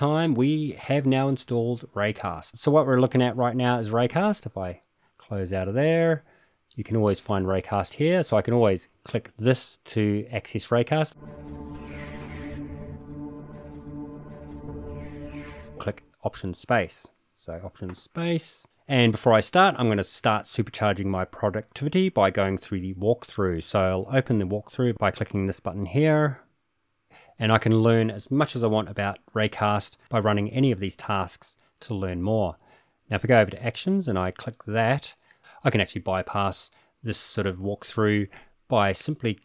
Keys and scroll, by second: 17.9 alt+space.